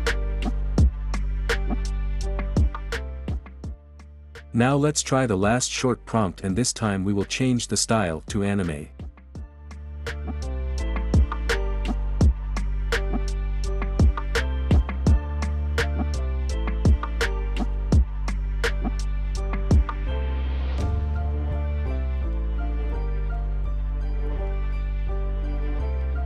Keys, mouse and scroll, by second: 2.7 click, 6.3-7.0 drag, 9.0 click, 10.7 ctrl+c, 12.3 click, 13.1 click, 16.6 click, 17.5 ctrl+a, 18.1 ctrl+v, 19.3-21.3 drag, 21.6 click, 24.1-25.1 drag, 25.7-26.2 drag.